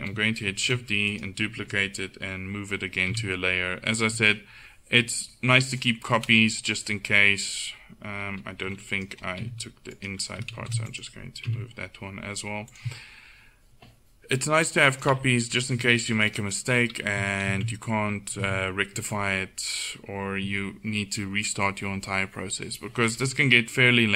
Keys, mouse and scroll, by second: 0.7 shift+d, 3.2 m, 5.8 right click, 6.2-7.7 middle drag, 9.0-10.3 right drag, 9.5 h, 10.7 shift+d, 11.5 m, 15.0-16.3 drag, 15.8 g, 17.5 alt+h, 17.9 middle click, 18.5 a, 23.1-24.1 middle drag.